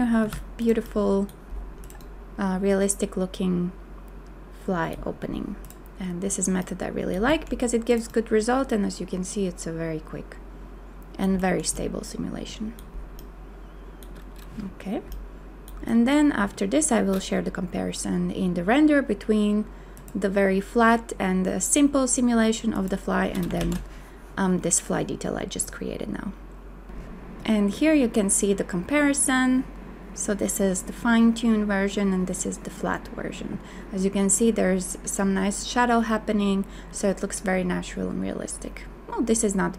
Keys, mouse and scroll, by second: 0.2 a, 23.6 ctrl+z.